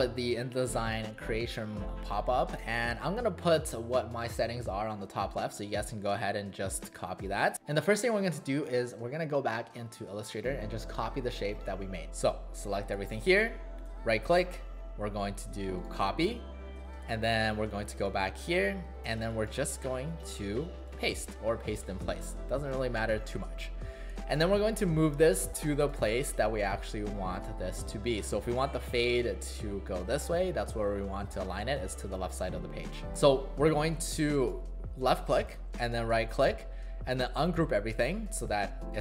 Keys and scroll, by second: 19.2 space, 33.0 ctrl+z.